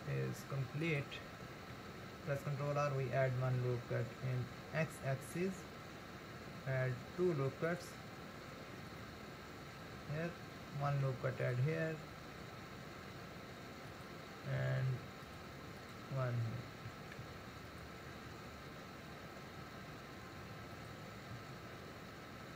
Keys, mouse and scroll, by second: 1.7 ctrl+r, 10.9 ctrl+r, 14.8 ctrl+r, 17.2 ctrl+r, 21.5 ctrl+r.